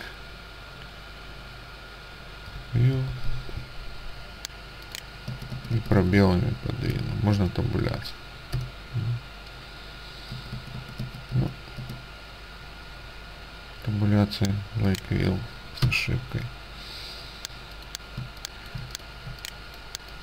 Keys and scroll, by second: 2.4-3.8 typing, 5.4 space, 5.6 space, 5.8 space, 7.0 space, 7.3 Tab, 8.7 BackSpace, 10.5 space, 10.7 space, 10.9 space, 11.8 space, 15.8 Delete, 18.3 space.